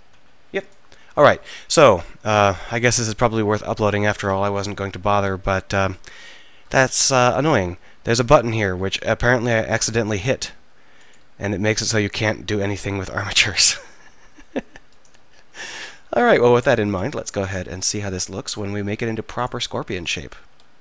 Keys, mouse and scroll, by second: 0.2 r, 10.4 r, 14.9-15.4 drag, 15.4 r, 16.3 right click, 17.4 r, 18.9 r, 20.5-20.8 right drag, 20.5 r.